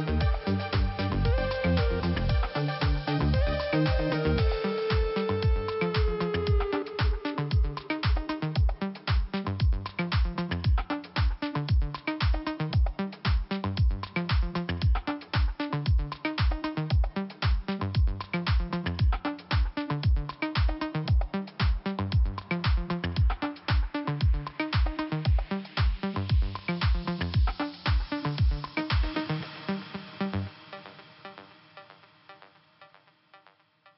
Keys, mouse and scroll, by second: 1.7 click, 2.7 click, 5.6 click, 5.9 double click, 7.0 double click, 10.0 click, 11.2 click, 14.0 click, 15.1 scroll down 1, 15.8 scroll up 1, 17.2 click, 18.1 click, 18.7 scroll down 2, 20.3 scroll up 1, 21.8 click, 26.5 scroll down 1, 27.5 click, 29.7-30.0 scroll up 2, 30.8 click, 31.5 scroll down 1.